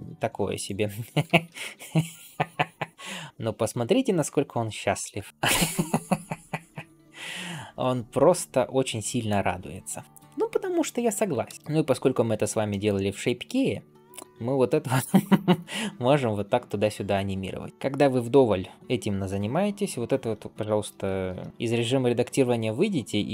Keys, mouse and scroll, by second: 0.7-1.1 scroll down 2, 1.1 alt+shift+z, 1.4-4.8 middle drag, 5.1-9.1 shift+middle drag, 5.3 scroll down 1, 9.6 scroll up 1, 10.0 middle click, 11.4 ctrl+space, 11.5 scroll up 2, 12.5 shift+middle click, 14.0-20.9 drag, 20.9 alt+shift+z, 21.5 Tab.